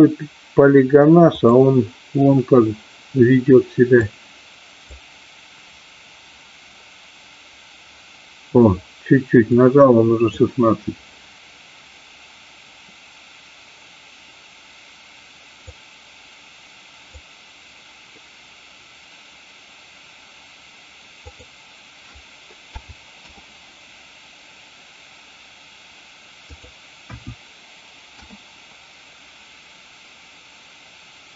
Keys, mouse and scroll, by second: 1.4-3.1 drag, 4.0-7.2 drag, 9.4-12.9 drag, 15.7-19.2 drag, 21.2-24.9 drag, 26.5-29.7 drag.